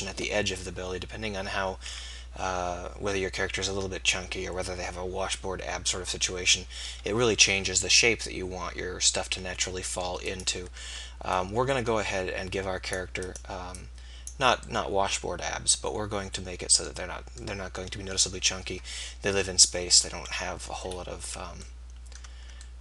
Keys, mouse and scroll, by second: 11.4-13.1 middle drag, 13.8-15.7 middle drag.